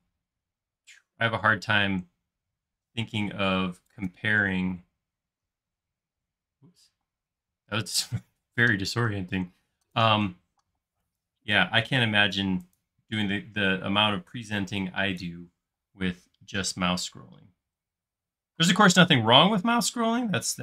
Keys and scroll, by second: 7.1 space, 10.5 m, 11.7 Up, 13.2 space, 15.6 m.